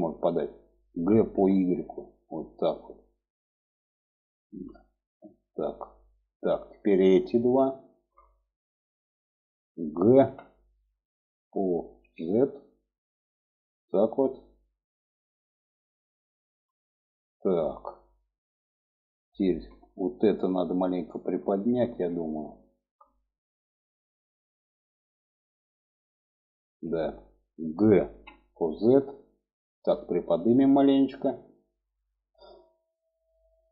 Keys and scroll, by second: 0.5 g, 4.0 g, 9.8 g, 27.6 g.